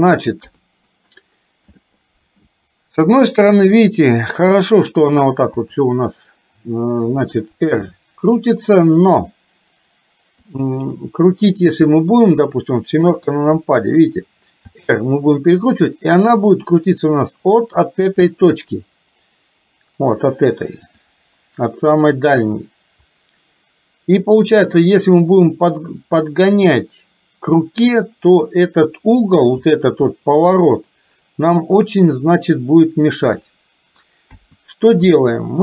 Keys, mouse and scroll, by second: 0.4 KP_3, 5.5 w, 7.4 r, 12.0 middle click, 13.1 KP_7, 14.8 r, 20.9 click, 29.5 r, 34.4 KP_1, 35.1 middle click.